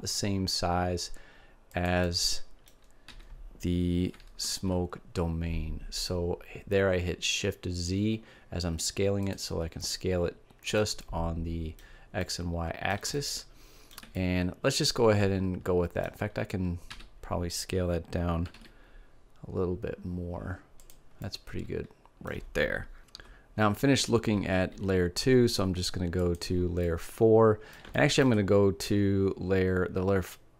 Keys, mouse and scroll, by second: 1.8-3.0 drag, 3.2 s, 9.3 click, 9.8-12.4 middle drag, 12.8 middle click, 14.4 middle click, 16.9 s, 20.9-22.6 drag, 26.3-28.1 drag, 28.1-29.8 middle drag.